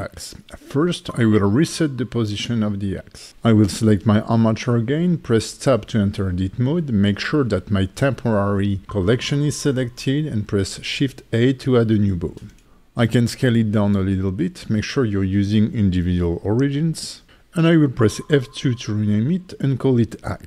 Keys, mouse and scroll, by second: 1.2 alt+g, 2.3 shift+middle click, 3.1 click, 3.9 Tab, 5.2 click, 8.3 shift+a, 10.2 click, 10.6 alt+middle click, 11.4 s, 11.9 right click, 12.9 click, 14.1 s, 14.5 click, 17.0 F2, 19.8 middle click.